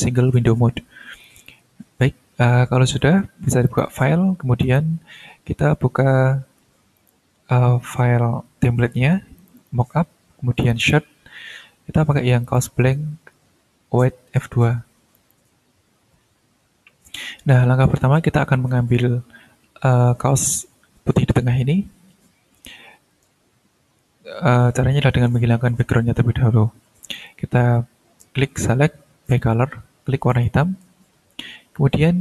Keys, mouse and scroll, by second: 1.2 click, 3.6 click, 4.6 click, 6.9 click, 9.4 click, 10.6 click, 12.4 click, 15.1 click, 27.1 click, 29.2 click, 30.3 click.